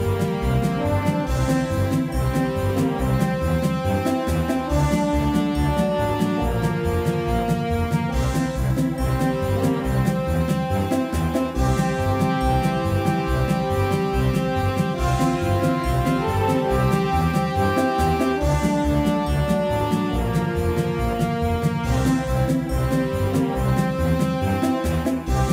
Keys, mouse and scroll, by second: 0.6 Tab, 1.1 z, 2.1-4.6 right drag, 4.3-6.5 drag, 6.5-8.8 right drag, 8.9 z, 9.4 z, 11.0-13.1 drag, 12.8 ctrl+z, 14.4-15.9 middle drag, 15.9-18.8 right drag, 16.8-19.0 drag, 19.0 ctrl+z, 21.1-23.5 right drag, 21.9-24.3 drag, 23.0 ctrl+z, 23.1 ctrl+z, 24.4 z.